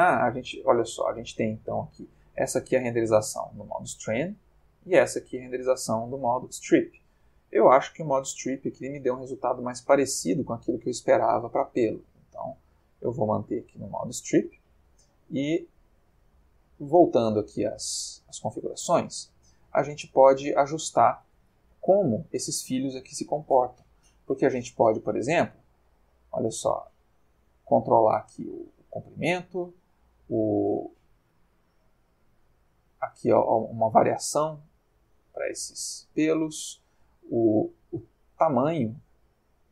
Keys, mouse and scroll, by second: 4.6 click, 12.3 click, 13.6 click, 15.7 click, 18.4-20.6 middle drag, 21.9-22.7 ctrl+middle drag, 25.4-29.2 drag, 29.7-36.4 drag, 37.4-39.7 drag.